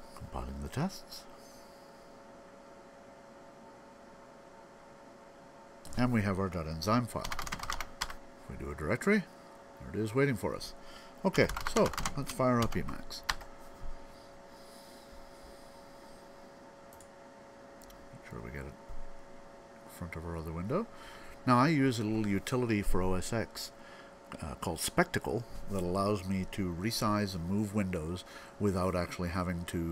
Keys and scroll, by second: 6.7-8.2 typing, 10.9-12.5 typing.